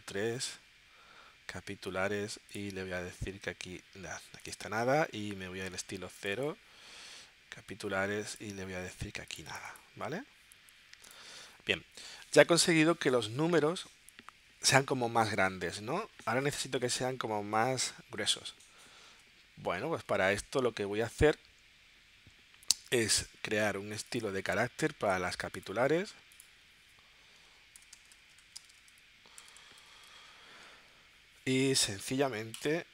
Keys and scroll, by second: 17.0 super+Tab, 27.6-31.1 typing.